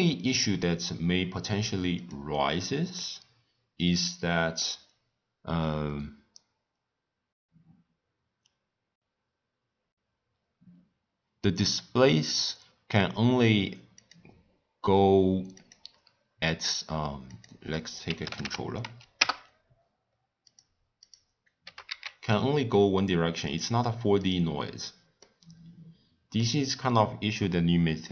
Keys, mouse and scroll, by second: 1.9 click, 2.9-6.1 middle drag, 12.3 click, 13.9-17.0 drag, 17.2-20.3 drag, 20.6 click, 21.0 click, 21.6 g, 24.2 click, 25.2-28.1 middle drag.